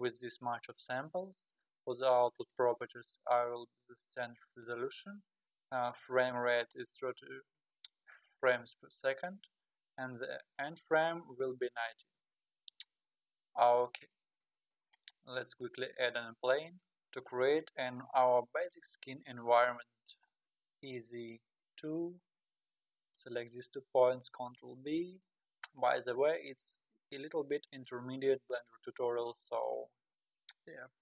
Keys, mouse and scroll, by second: 2.3 click, 14.0 click, 15.5 shift+a, 18.1 click, 20.8 e, 23.2 click, 24.4 ctrl+b, 27.1 Tab, 27.7-30.8 right drag.